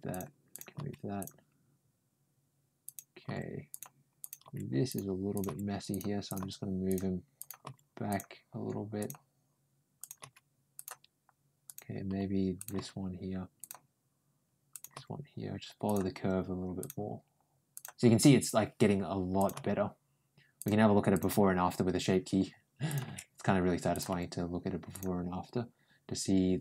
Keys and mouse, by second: 0.3 click, 0.6 g, 2.7 click, 3.1 g, 4.0 click, 4.3 g, 5.2 click, 5.3 g, 6.1 click, 6.7 g, 7.2 click, 7.5 g, 8.8 click, 9.8 click, 10.5 g, 11.5 click, 12.4 click, 12.6 g, 14.5 click, 14.8 g, 16.6 click, 17.6 click, 19.2 click, 19.4 g, 20.9 click, 21.1 g, 23.8 click, 23.9 ctrl+g.